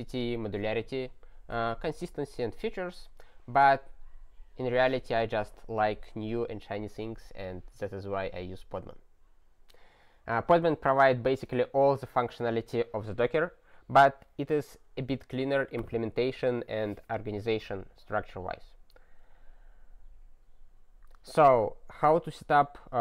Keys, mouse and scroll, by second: 18.9-23.0 scroll down 44.